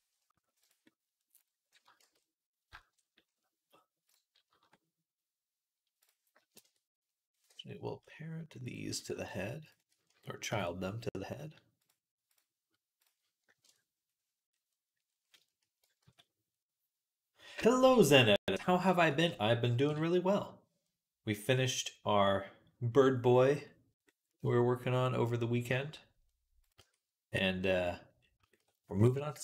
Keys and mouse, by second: 1.9 shift+c, 7.3 Escape, 10.3 ctrl+p, 15.9 ctrl+s, 19.7 KP_Decimal, 23.6-25.2 middle drag, 26.5-27.7 right drag, 26.6 Tab, 28.2-29.4 shift+right drag.